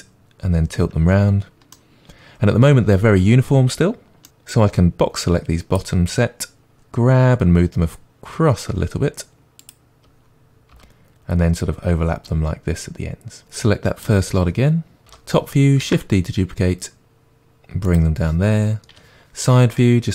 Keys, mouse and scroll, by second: 4.5-5.1 drag, 6.7 g, 9.6 click, 10.7 g, 13.4 click, 13.9-14.5 drag, 15.1 KP_7, 15.8 shift+d, 17.9 click, 18.9 KP_3.